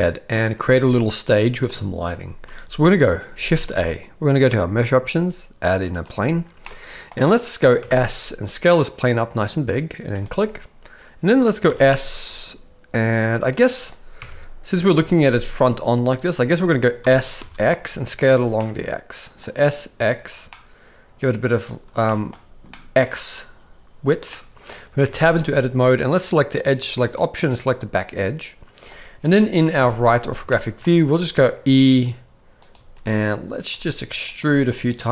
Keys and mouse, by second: 0.0 middle click, 3.6 shift+a, 6.6-7.0 middle drag, 7.8 s, 11.7 s, 14.2 KP_1, 17.0 s, 18.6-19.4 middle drag, 20.5-21.5 middle drag, 22.1 shift+middle click, 22.7 middle drag, 24.3 middle click, 25.1 Tab, 26.7 click, 27.5 click, 29.8 KP_3, 30.5 shift+middle click, 31.1 e, 32.8-35.1 typing.